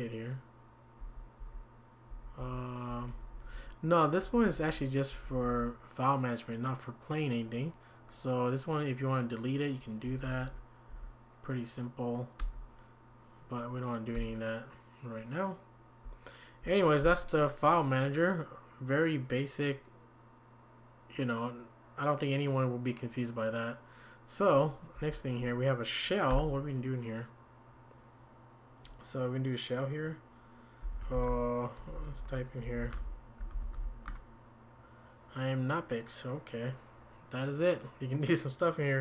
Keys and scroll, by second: 1.0 Down, 1.4 Down, 2.1 Down, 2.4 Down, 2.9 Up, 3.1 Up, 4.2 Down, 4.4 Down, 5.1 Up, 5.3 Up, 10.0 Down, 10.9 Down, 12.4 Escape, 14.1 Escape, 16.0 Down, 16.5 Down, 16.6 Down, 24.9 Down, 30.6-31.8 typing, 33.3-34.0 typing, 34.1 Return.